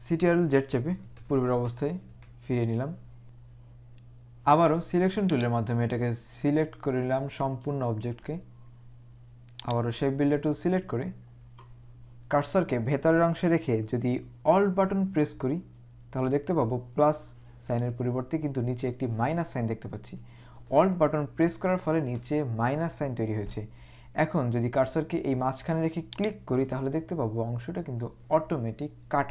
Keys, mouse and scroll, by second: 1.0 ctrl+z, 1.8 ctrl+z, 2.1 ctrl+z, 5.4 click, 9.7 click, 26.1 alt+click.